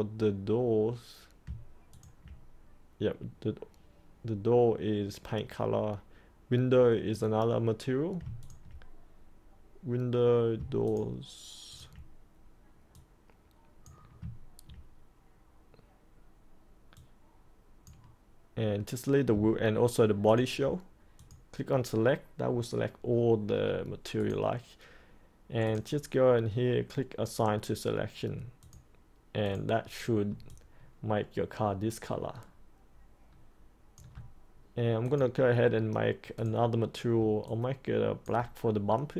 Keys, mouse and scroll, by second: 1.9 ctrl+click, 8.4 ctrl+click, 10.8 ctrl+click, 11.7 ctrl+click, 13.2 click, 16.9-18.3 drag, 20.2 ctrl+click, 21.1 click, 30.4-34.0 alt+drag, 35.0 click, 37.4 alt+click.